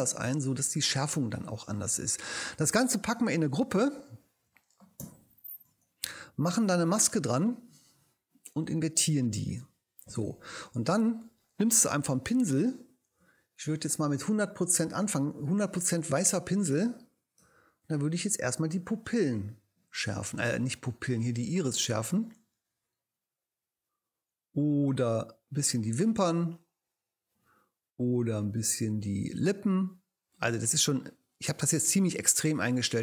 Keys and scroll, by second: 5.6 super+g, 9.3 super+i, 11.7 b.